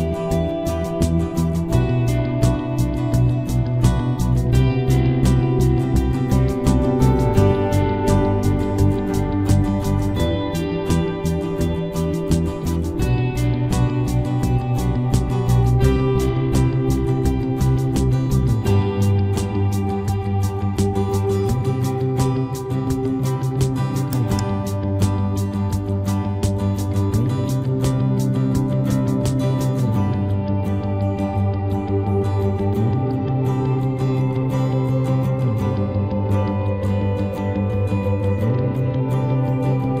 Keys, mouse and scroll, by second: 0.1 c, 7.7 z, 11.2-14.4 middle drag, 13.0 c, 14.6 right click, 14.6 z, 16.0 KP_2, 16.4 KP_3, 17.5 c, 19.1-20.4 drag, 20.4 right click, 20.4 c, 21.0 middle click, 23.7-25.5 right drag, 24.5 c, 25.7 ctrl+s, 28.6 c, 29.9 right click, 30.8 KP_Decimal, 35.4 i, 39.5 z, 39.8-40.0 middle drag.